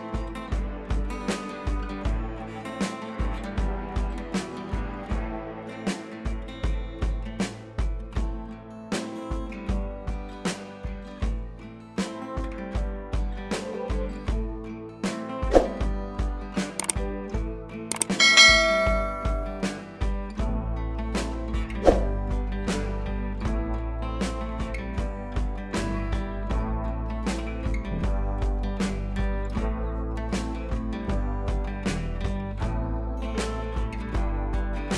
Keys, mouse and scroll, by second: 0.3 scroll down 2, 1.1 click, 1.5-1.9 click, 2.1 alt+scroll up 2, 2.8-3.2 alt+scroll up 2, 3.2-3.5 click, 4.2-4.5 shift+drag, 10.5 click, 11.8 click, 12.5 ctrl+click, 12.9 ctrl+c, 13.7 ctrl+v, 14.5-20.0 drag, 15.6 click, 20.0-20.5 shift+drag, 25.2 Left, 26.3-27.1 click, 27.3 Left, 28.1 click, 31.1 click, 33.0-33.5 click, 33.9 right click, 34.3 click.